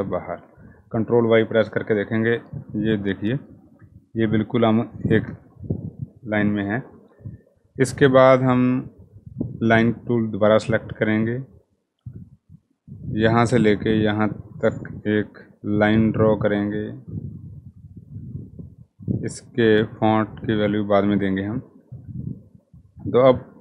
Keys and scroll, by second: 0.0 ctrl+y, 5.0 ctrl+y.